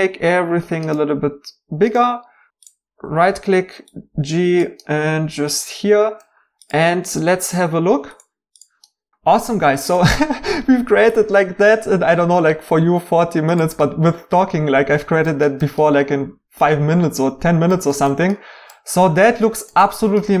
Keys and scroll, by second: 3.3 g.